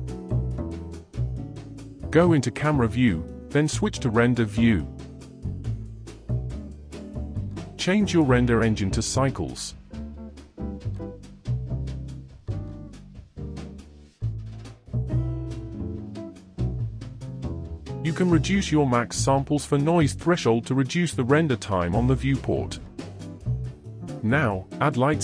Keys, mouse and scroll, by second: 0.6 KP_0, 4.1-7.3 drag, 8.6 click, 9.8-16.6 drag, 16.6 0, 19.3-21.3 drag, 21.3 0, 23.6 shift+a.